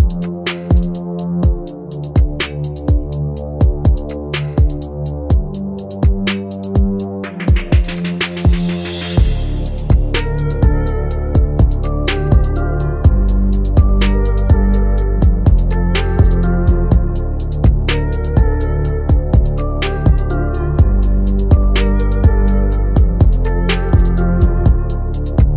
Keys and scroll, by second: 1.0 ctrl+g, 1.8 shift+F2, 2.1 Escape, 6.0 Caps_Lock, 7.0 f, 8.1-17.5 typing, 18.6 Escape, 22.7 ctrl+z, 23.9 shift+F2.